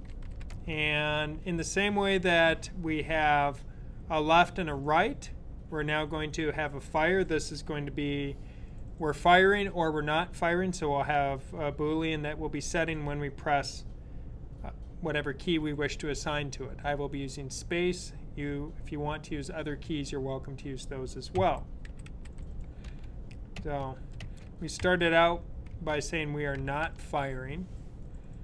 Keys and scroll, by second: 0.0-1.0 typing, 21.3-22.8 typing, 25.7-27.6 typing.